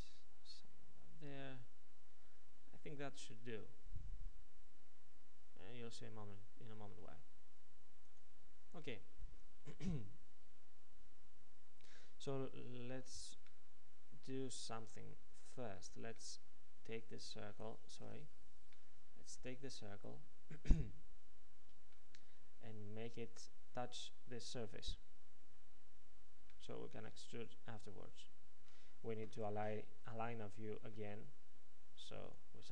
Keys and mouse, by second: 18.1 KP_Decimal, 28.1-32.0 middle drag.